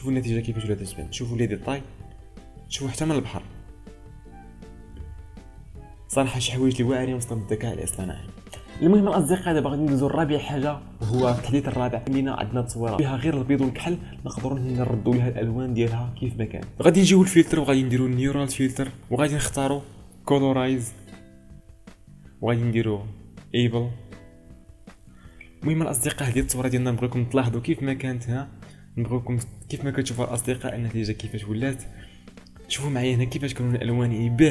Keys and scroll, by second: 4.9 ctrl+space, 27.6 ctrl+space, 34.3 ctrl+space.